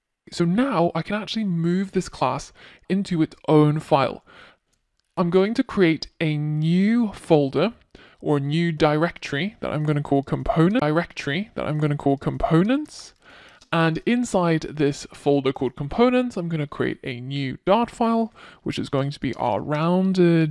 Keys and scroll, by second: 5.0 super+x, 6.7 super+x.